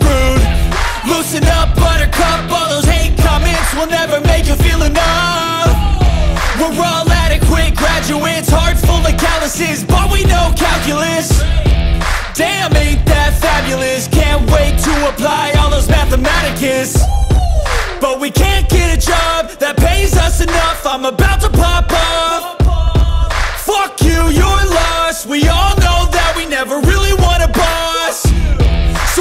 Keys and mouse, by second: 1.3 click, 2.3 g, 5.1 click, 7.3 r, 8.1 click, 10.3 click, 11.9-14.3 drag, 14.5 click, 15.8-19.1 drag, 25.1-26.4 drag.